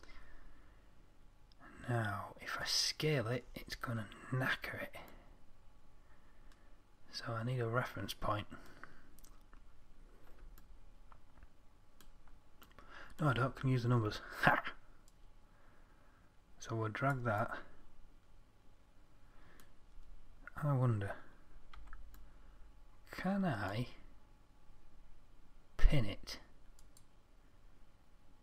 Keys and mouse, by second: 3.1-5.5 middle drag, 7.4-10.4 middle drag, 12.4 middle click, 15.4-17.4 drag, 22.1 z.